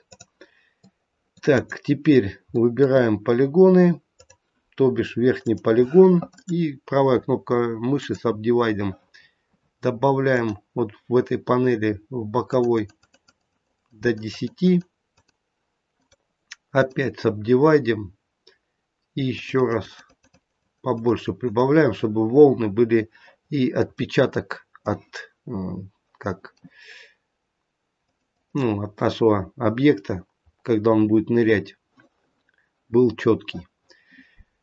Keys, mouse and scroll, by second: 0.1 click, 0.7 middle click, 1.4 click, 2.5 middle click, 4.2 click, 5.3 click, 6.2 right click, 10.4 click, 12.4 click, 12.6 click, 13.0 click, 13.2 click, 13.4 click, 13.6 click, 13.9 click, 14.2 click, 14.5 click, 15.0 click, 15.9 right click, 19.2 click, 19.5 click, 19.7 click, 19.9 click, 20.3 click, 20.5 click, 20.8 click, 21.4 click, 22.5-23.4 scroll up 2, 23.4-24.0 scroll up 3, 23.9 middle click, 28.0 click, 28.3 click, 30.0-31.3 scroll down 6, 31.3-33.5 scroll down 1.